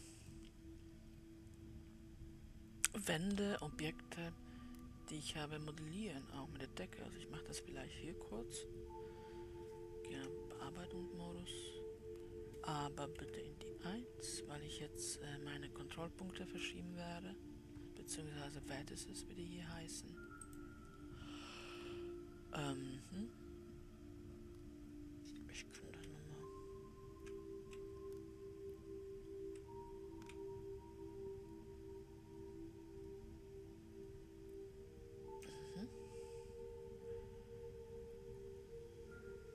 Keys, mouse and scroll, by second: 10.8 Tab, 13.6 1, 15.7-18.3 drag, 21.0-23.1 drag.